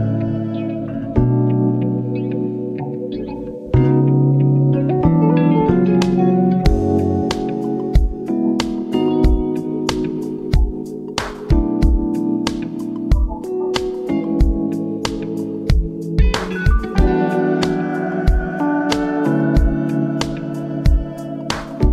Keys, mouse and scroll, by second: 0.1 ctrl+alt+scroll down 1, 0.9 ctrl+alt+scroll up 1, 1.6 click, 3.7 click, 4.0-4.4 ctrl+alt+scroll up 1, 4.4 v, 5.0 click, 5.6 ctrl+alt+scroll down 1, 6.1 ctrl+alt+scroll up 2, 7.1 click, 7.9-10.1 scroll down 1, 10.4 click, 12.9 click, 16.4 click, 19.7-20.8 scroll up 1.